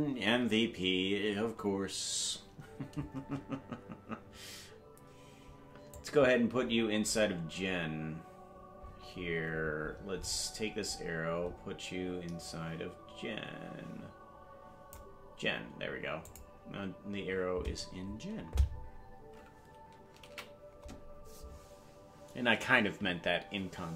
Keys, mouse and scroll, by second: 5.9-15.1 drag, 6.6-8.0 scroll up 11, 8.7-10.4 scroll down 23, 11.2-11.6 scroll down 3, 16.2 click, 22.4 ctrl+s.